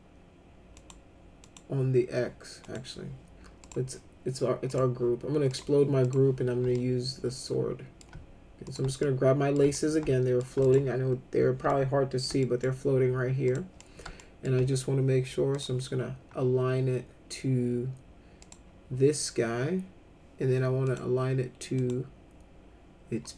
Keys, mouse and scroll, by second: 0.7 click, 1.4 click, 2.6 click, 3.6 click, 4.7 click, 5.5 click, 6.0 click, 6.7-8.0 alt+middle drag, 8.6 click, 9.0 alt+middle click, 9.7 alt+middle click, 10.6 click, 11.6 alt+middle click, 12.4 middle click, 13.4 click, 13.8 middle click, 14.2 alt+middle click, 15.5 click, 18.4 click, 20.8 click, 21.8 click.